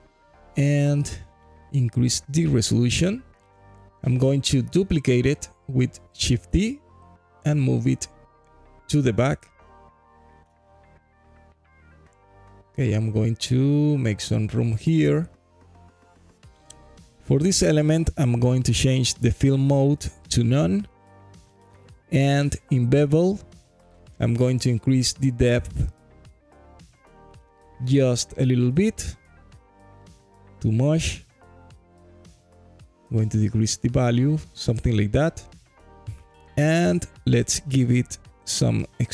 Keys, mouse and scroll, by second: 3.3-3.7 scroll up 1, 3.8 alt+middle click, 4.0 alt+click, 5.8 shift+d, 7.4 right click, 8.2 alt+click, 9.1 g, 9.3 y, 10.2 click, 10.6 alt+click, 11.9 click, 12.7 g, 12.9 y, 14.0 click, 14.4 alt+click, 15.4 click, 17.8-18.8 drag, 24.8-30.1 shift+drag, 31.1-33.5 drag, 32.3 KP_0, 36.3-39.1 shift+drag.